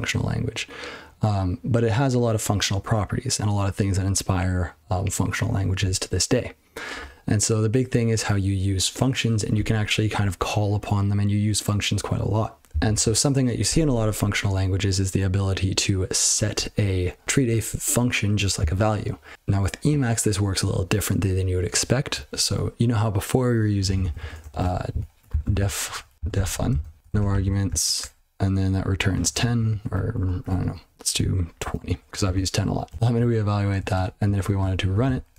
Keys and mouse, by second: 12.6 ctrl+n, 12.7 ctrl+n, 12.9 ctrl+n, 23.8 ctrl+p, 24.0 ctrl+p, 24.1 ctrl+p, 24.2-27.5 typing, 28.0 Tab, 28.9-30.2 typing, 31.4-32.2 typing, 32.9 ctrl+c, 34.0 Return, 34.4-35.3 typing.